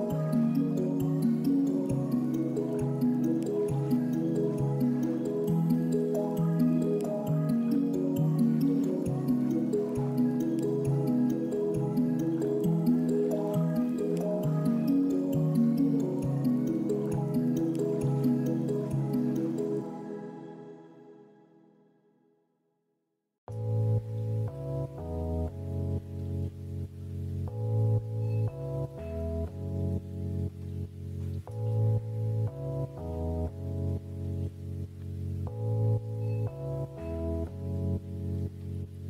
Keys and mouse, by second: 4.1 click, 4.7-8.2 drag, 14.9 click, 18.5-20.0 drag, 24.9 click, 27.5-28.9 drag, 30.6-32.8 drag.